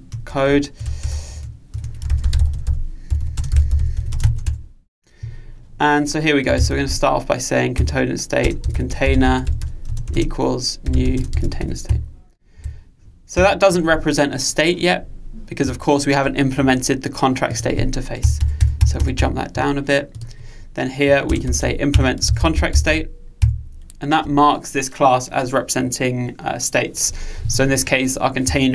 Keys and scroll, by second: 7.8 Return, 21.9 Return.